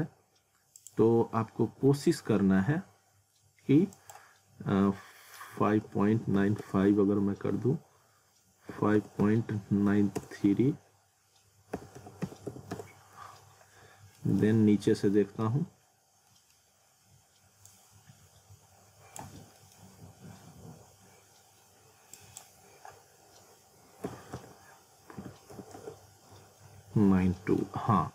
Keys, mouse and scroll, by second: 0.8 click, 1.7 z, 2.7-3.4 scroll up 1, 3.9 click, 14.2 middle click, 14.4 z, 14.9 scroll up 1, 15.2 middle click, 15.6 scroll up 1, 15.7-16.0 scroll, 16.0 scroll up 1, 16.3 middle click, 16.6 scroll up 1, 17.7 click, 19.2 z, 19.6 middle click, 19.9-20.2 scroll up 1, 22.2 click, 27.4 middle click, 27.7 z.